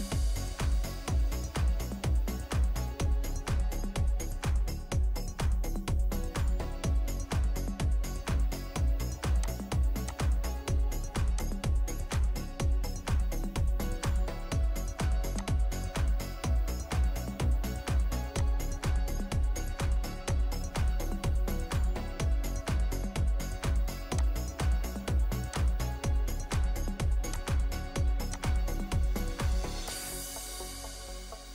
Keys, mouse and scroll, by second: 0.6 Escape, 1.7-4.9 scroll up 1, 5.2 scroll up 1, 5.3 scroll down 1, 6.2-6.6 scroll up 1, 6.6-9.4 scroll down 1, 16.6 Escape, 22.4-22.9 scroll down 1, 22.9 scroll up 1, 23.0-24.2 scroll down 1, 30.7 Return.